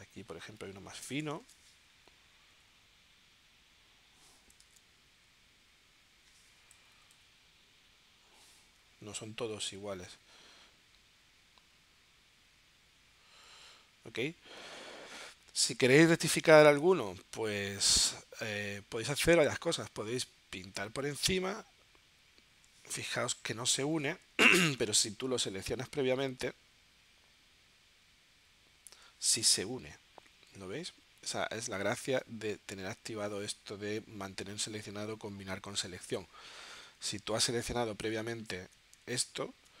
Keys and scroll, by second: 1.4 super+z, 2.2 9, 4.7 super+z, 6.7 0.